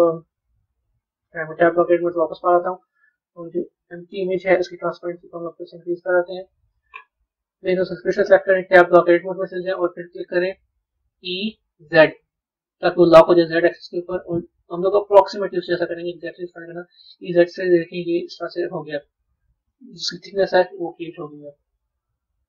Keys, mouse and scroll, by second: 1.5 Tab, 3.4 click, 4.8-7.7 drag, 8.7 b, 16.4 middle click, 19.7-22.0 middle drag, 22.0 KP_1.